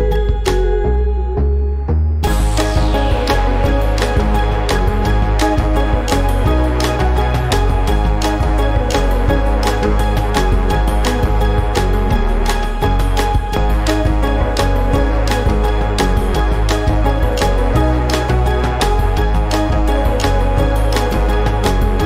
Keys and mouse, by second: 1.4 click, 6.7 =, 7.4 -, 8.4 =, 9.6 -, 11.2 click, 12.9 ctrl+z, 15.4 click, 17.1 click, 20.0 click.